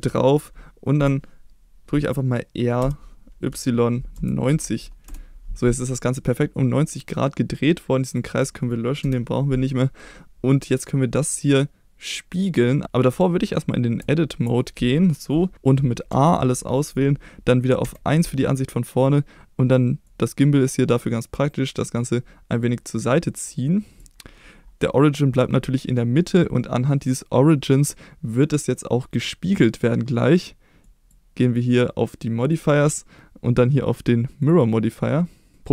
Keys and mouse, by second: 2.8 r, 3.5 y, 4.1 9, 4.5 0, 5.1 Return, 6.3-6.9 middle drag, 7.3-7.7 middle drag, 8.0 click, 9.0 Delete, 12.4 click, 14.0 Tab, 15.5 a, 16.1 a, 17.8 KP_1, 20.1-24.0 drag, 30.8 click.